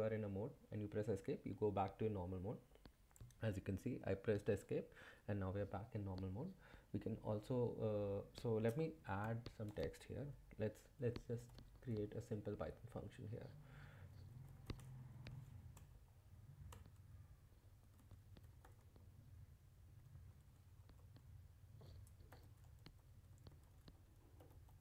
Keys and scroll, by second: 0.9 Escape, 9.2 typing, 11.1-12.0 typing, 14.3-15.9 typing, 16.7 Return, 17.8-21.0 typing, 21.5 Left, 22.1-24.8 typing.